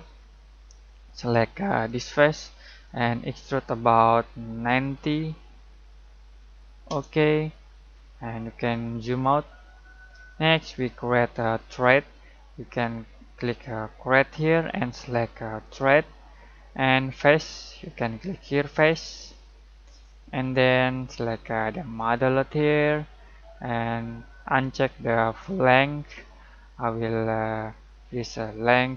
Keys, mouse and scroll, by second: 1.8 click, 4.6-5.0 typing, 6.9 Return, 7.6-7.9 scroll down 1, 8.3-8.7 scroll up 1, 8.3 typing, 9.6 scroll down 1, 9.8-14.0 middle drag, 11.2 typing, 13.8 typing, 14.0 click, 18.9 click, 21.6 typing, 22.0 click, 25.5 click, 25.5 typing, 25.5 click, 28.7-28.9 drag, 28.7 typing.